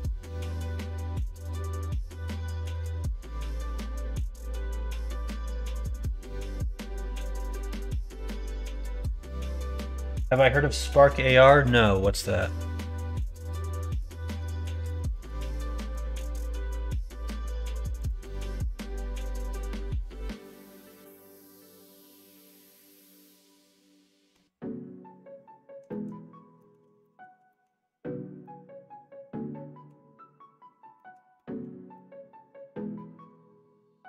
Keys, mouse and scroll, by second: 1.6 click, 2.1 click, 2.4 middle click, 3.0-8.8 middle drag, 11.6-13.9 middle drag, 14.9 shift+middle click, 15.4 middle click, 15.7 middle click, 17.9 click, 19.5-24.3 middle drag, 25.8 middle click, 26.5 middle click, 27.0 shift+middle click, 27.4 middle click, 28.3-29.8 middle drag, 30.9 middle click, 31.3 middle click, 31.9 middle click, 32.9 shift+middle click.